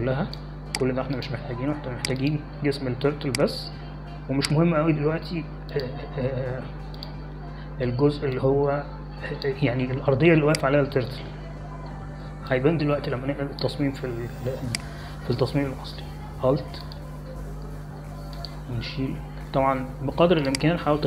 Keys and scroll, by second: 14.4 space.